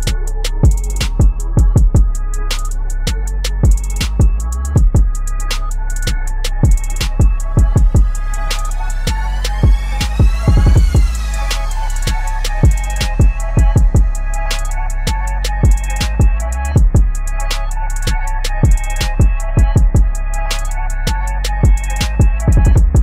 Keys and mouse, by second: 0.6 ctrl+t, 0.9-3.0 drag, 3.0 Down, 5.9 ctrl+j, 6.3 ctrl+t, 6.5 right click, 7.6-10.7 drag, 10.7 ctrl+t, 11.2 click, 11.3-20.5 drag, 20.5 ctrl+[, 22.7-23.0 drag.